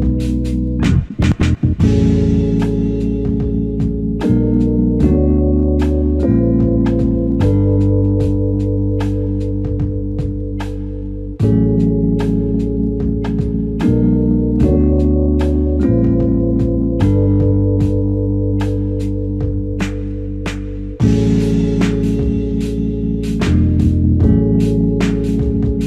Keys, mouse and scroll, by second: 5.6 alt+click, 6.5 alt+click, 6.6 ctrl+alt+click, 7.3 alt+click, 9.7 ctrl+Tab, 10.9 ctrl+Tab, 13.1 typing, 16.1 typing, 20.5 right click, 24.9 Escape.